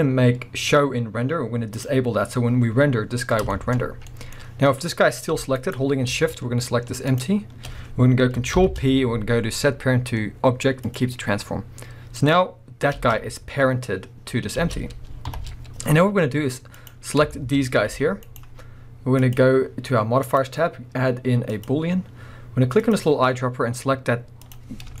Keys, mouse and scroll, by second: 3.5-5.8 shift+middle drag, 3.8-5.3 scroll up 3, 5.3 g, 5.8 right click, 7.1 shift+click, 8.5 ctrl+p, 11.3-11.6 scroll down 2, 12.2 click, 13.0 space, 14.6 space, 15.3 shift+Left, 16.7 click, 17.3-18.4 shift+middle drag, 17.9 g, 18.4 right click, 19.2 click, 20.2-22.9 drag, 24.7-25.0 scroll down 1.